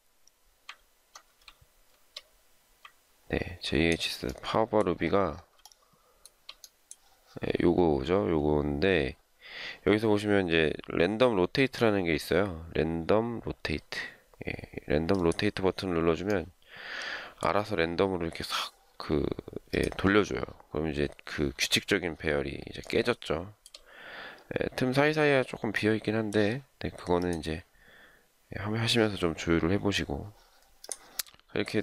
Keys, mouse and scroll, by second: 5.6 shift+middle click, 22.8 shift+middle click, 23.6-24.3 shift+scroll down 1.